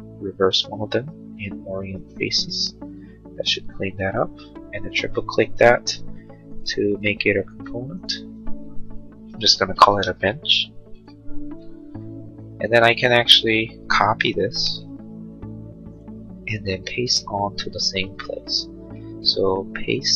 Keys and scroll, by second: 11.5 Return, 14.7 ctrl+c, 19.4 ctrl+v.